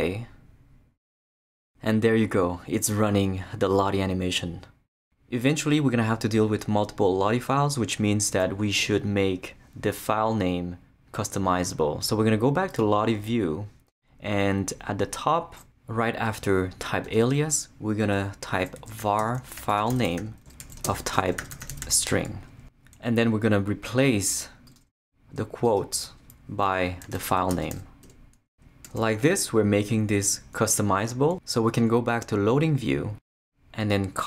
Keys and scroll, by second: 17.0 Return, 18.5-22.3 typing, 26.8-28.2 typing, 28.8 super+s.